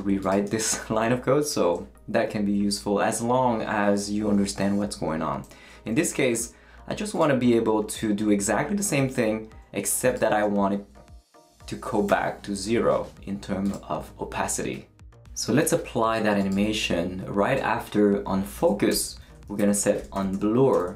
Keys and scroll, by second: 12.1 0, 18.9 Return, 19.2-20.9 typing.